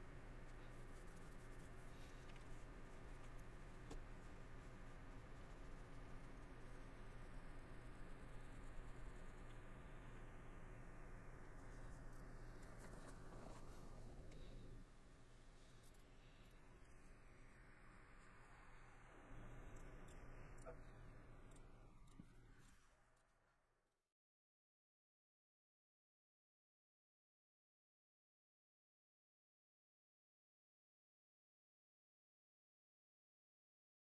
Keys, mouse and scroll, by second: 2.6 middle click, 3.2 middle click, 3.4 scroll, 3.6 middle click, 4.2 middle click, 6.8 middle click, 9.5 middle click, 10.4 middle click, 11.7 middle click, 12.1 scroll, 12.2 middle click, 13.2 middle click, 15.8-16.1 scroll, 16.1 middle click, 16.4 scroll, 16.6 middle click.